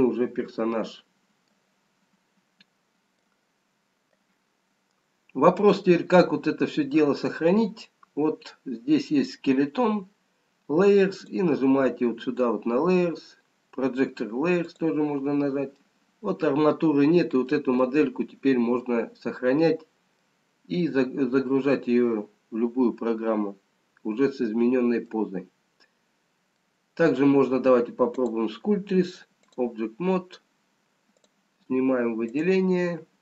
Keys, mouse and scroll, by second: 0.0 middle click, 2.7-4.0 scroll down 1, 4.0 middle click, 11.1 click, 15.9 middle click, 18.5 middle click, 19.7-20.8 scroll down 1, 20.8 middle click, 26.2 scroll down 1, 26.8 middle click, 28.1 click, 31.9 click, 32.7 click.